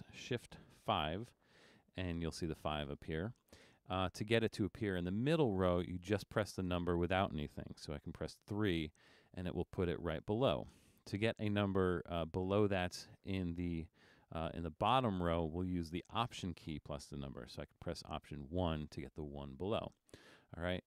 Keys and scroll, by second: 1.1 shift+%, 8.4 3, 18.3 alt+1.